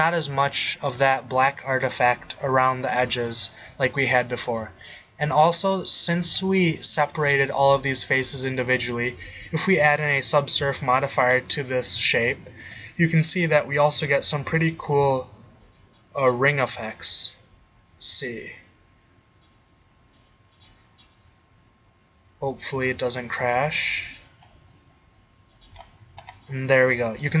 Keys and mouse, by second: 7.4-7.9 middle drag, 10.3 middle click, 10.3-11.0 middle drag, 24.3 middle click, 25.0-26.0 middle drag, 26.4-27.0 middle drag.